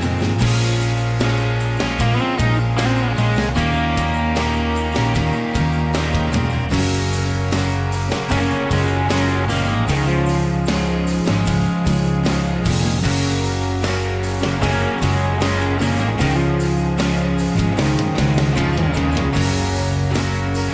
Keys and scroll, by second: 13.5 b, 19.4 Escape.